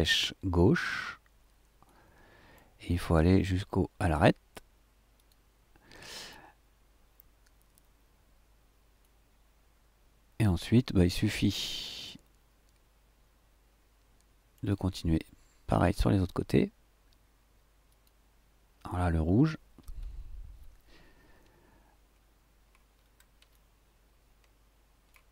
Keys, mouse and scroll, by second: 1.8 right click, 5.1 click, 9.0 right click, 9.3 right click, 9.5-10.5 middle drag, 10.8 middle click, 11.9 middle click, 13.4-14.7 drag, 14.9-15.9 drag, 17.9 click, 19.8 Right, 22.9-23.4 shift+scroll down 2, 23.5-25.3 shift+drag.